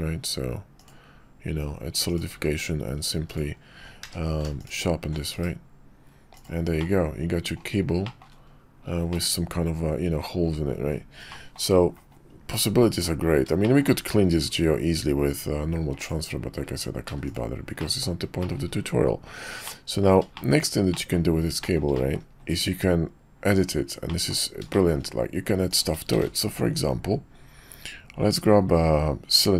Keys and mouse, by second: 2.3 q, 4.0 q, 5.3 /, 7.0-7.6 middle drag, 8.0 shift+drag, 9.1-10.2 middle drag, 11.2-11.5 middle drag, 13.6 shift+middle click, 15.9 click, 17.0 x, 17.8 drag, 18.4 shift+click, 19.6-20.0 drag, 20.3 shift+drag, 20.9 drag, 21.6 shift+middle click, 21.9 middle drag, 24.2 middle click, 24.7 shift+middle click, 25.7 click, 26.1 shift+a.